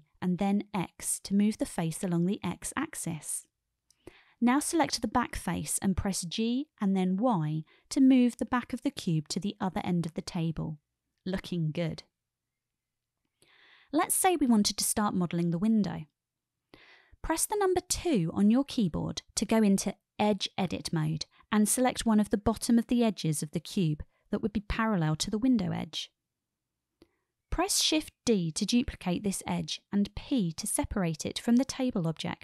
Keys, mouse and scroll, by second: 0.4 shift+middle click, 1.4 g, 2.0 x, 4.3 click, 5.3-5.7 drag, 5.8-6.3 shift+middle drag, 6.9-7.4 shift+middle drag, 8.2 g, 8.6 y, 12.0 click, 16.1-16.7 shift+middle drag, 16.7 shift+click, 20.7 2, 22.7 click, 23.9-24.5 shift+middle drag, 24.5 shift+click, 24.8 shift+middle click, 26.3-27.2 shift+middle drag, 29.7 shift+d, 30.8 click, 32.1 p.